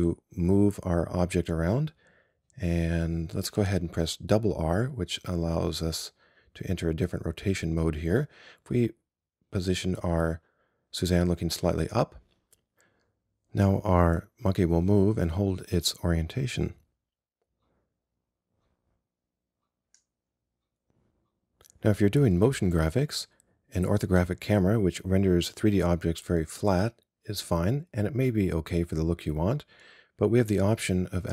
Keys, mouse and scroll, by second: 3.6 r, 14.2-16.2 scroll up 1, 16.2-18.0 scroll down 1.